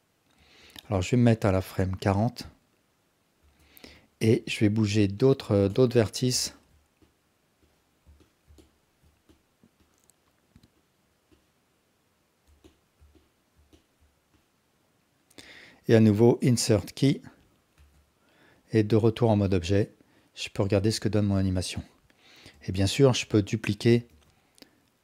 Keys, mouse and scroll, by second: 0.8-3.1 drag, 3.4 Tab, 4.0 alt+click, 5.3 drag, 5.7 alt+drag, 6.4 ctrl+alt+drag, 7.7-8.0 drag, 8.2 alt+click, 8.6 ctrl+alt+click, 9.9 click, 11.4-12.9 drag, 13.1-13.5 ctrl+alt+drag, 13.7 alt+drag, 14.4-15.2 drag, 17.8 Tab, 18.6-20.4 drag, 20.6 space, 23.1 click, 24.1 shift+d.